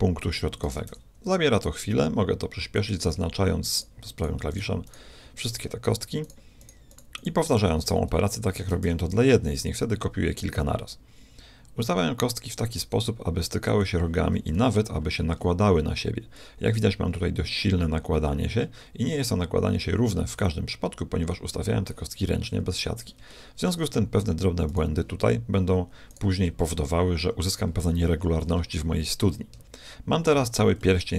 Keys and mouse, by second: 0.7 shift+d, 3.8 click, 8.6 shift+d, 8.8 right click, 14.6 z, 15.4-17.3 middle drag, 22.5-23.5 middle drag, 24.7-27.8 right drag, 30.1 a, 30.4 z, 30.8-31.1 middle drag.